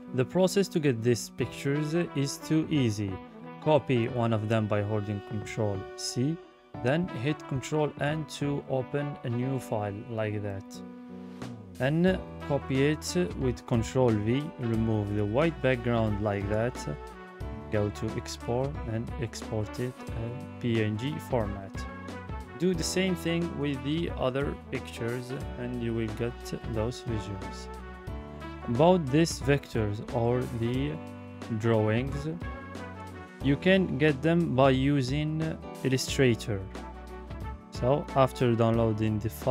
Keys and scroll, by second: 3.8 ctrl+c, 6.7 ctrl+n, 10.6 ctrl+v, 26.7 ctrl+v.